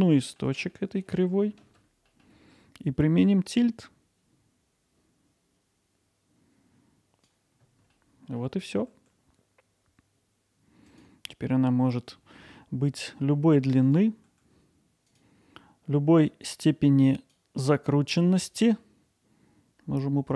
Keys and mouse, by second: 0.7 alt+middle click, 2.1 middle click, 3.3-7.3 drag, 8.0 alt+middle click, 10.9 click, 11.5 middle click, 11.9 middle click, 12.4 alt+middle click, 17.2 click, 18.6-20.3 drag.